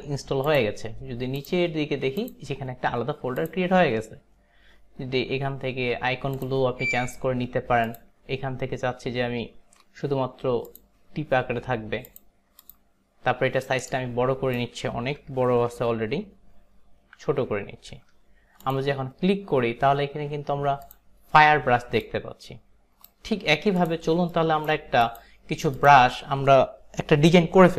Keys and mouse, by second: 13.4 click, 13.9 alt+right click, 18.7 click, 22.0 click, 23.8 click, 24.5 alt+right click, 25.1 click, 25.8 click.